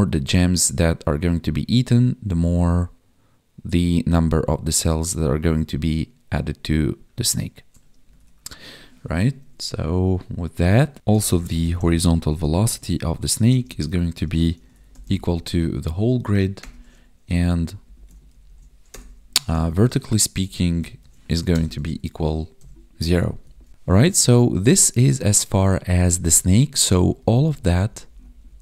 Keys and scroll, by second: 8.2 Tab, 10.9 ctrl+s, 13.3 space, 13.6 space, 17.4 Up, 17.8 alt+shift+Down, 18.2 ctrl+Right, 20.2 ctrl+Right, 20.9 ctrl+shift+Right, 21.7 ctrl+s, 22.5 Right, 23.3 Down, 27.0 Up, 27.1 Left, 27.2 Up, 27.4 Left, 27.5 Up, 27.6 Left, 27.8 Up, 27.9 Left, 28.0 Up, 28.1 Left.